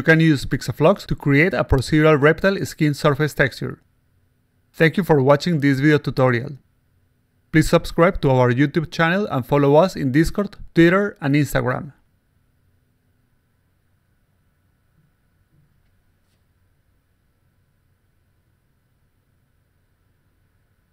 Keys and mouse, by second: 0.1 click, 0.3 click, 0.5 click, 1.1 click, 2.0 click, 2.7-4.0 alt+drag, 5.3 click, 6.3-20.9 drag.